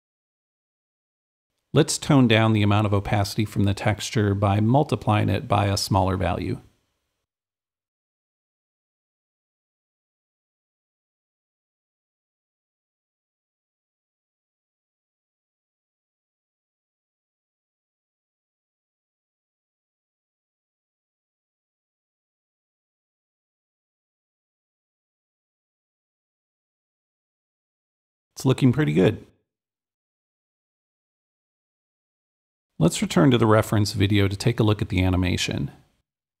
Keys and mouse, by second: 5.6-7.9 drag, 6.7 shift+8, 9.9 Return, 9.9-11.2 drag, 11.3-13.3 drag, 12.9 2, 13.2 Return, 15.6-18.2 drag, 21.2-23.2 drag, 24.9-30.8 drag, 27.0 w, 30.8-36.4 right drag, 31.7 s.